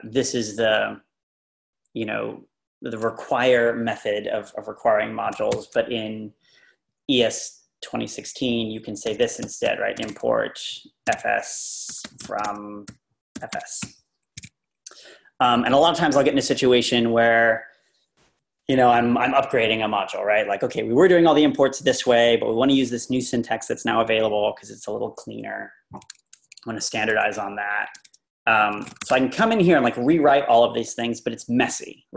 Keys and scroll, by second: 5.5 shift+o, 8.9-14.4 typing, 14.4 Escape, 15.4 Left, 16.3 Down, 16.6 Up, 28.0-29.5 typing.